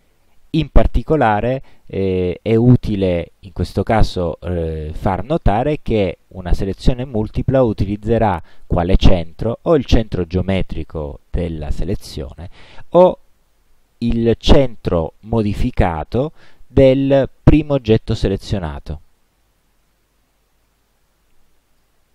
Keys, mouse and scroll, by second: 3.4 click, 18.9-22.1 drag.